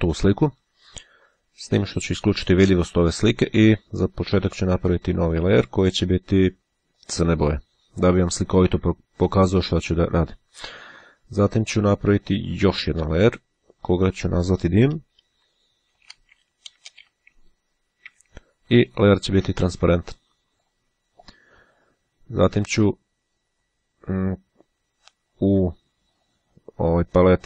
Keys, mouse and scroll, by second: 2.6-3.6 drag, 5.3 click, 7.0 click, 8.0 click, 12.6-13.8 drag, 15.2-17.8 typing, 19.7 click, 20.5 click, 23.7 click, 25.4-26.7 scroll down 1.